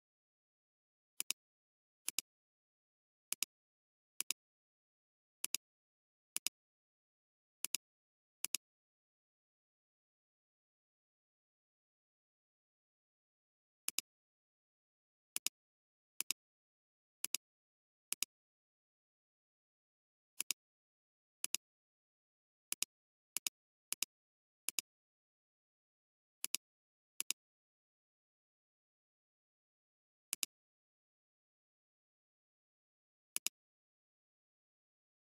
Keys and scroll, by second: 1.3 space, 3.4 space, 5.5 space, 7.7 space, 15.3 space, 17.3 space, 19.0 alt+space, 21.5 space, 24.6 space, 25.1 space, 27.2 space.